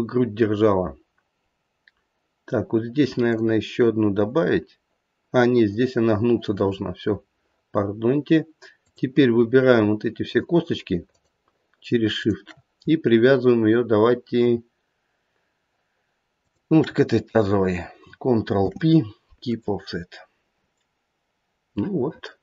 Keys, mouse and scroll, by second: 3.2 click, 8.8 click, 9.4 scroll up 1, 10.2 shift+click, 11.0 shift+click, 12.2 shift+click, 16.3 shift+click, 18.5 ctrl+p, 21.3 scroll down 1, 21.7 middle click.